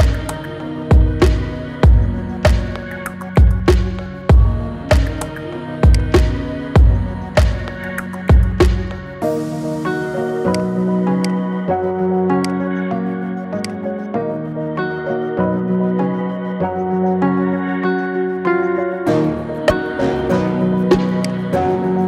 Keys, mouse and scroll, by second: 1.7-2.1 scroll down 5, 2.1-3.5 middle drag, 3.5 ctrl+b, 6.2-6.9 middle drag, 6.9-7.3 scroll up 5, 7.3-7.8 shift+middle drag, 7.8-8.2 scroll down 2, 8.2 shift+middle click, 9.0 Tab, 9.5-10.0 middle drag, 10.0 scroll down 4, 10.3-12.2 right drag, 12.2 click, 12.6 scroll down 2, 13.4 click, 13.9-15.0 scroll up 3, 15.0 KP_3, 16.1 KP_1, 16.6-16.9 scroll up 4, 17.0-18.0 shift+middle drag, 18.0-18.7 scroll up 2, 18.7 shift+d, 21.4-21.9 shift+middle drag, 21.9-22.0 scroll up 4.